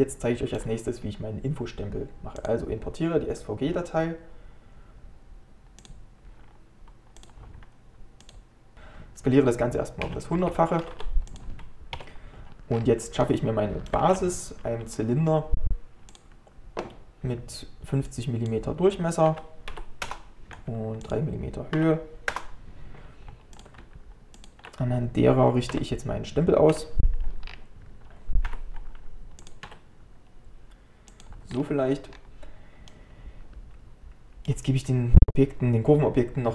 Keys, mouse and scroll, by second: 2.4-6.0 drag, 8.7 scroll down 10, 10.1 s, 12.0 KP_Decimal, 12.7 scroll down 1, 13.2 middle click, 14.0 shift+a, 18.1-24.5 drag, 25.7 KP_1, 27.5 scroll down 1, 28.5 g, 31.5 scroll down 1, 32.2-32.9 scroll up 2, 32.9-35.9 middle drag.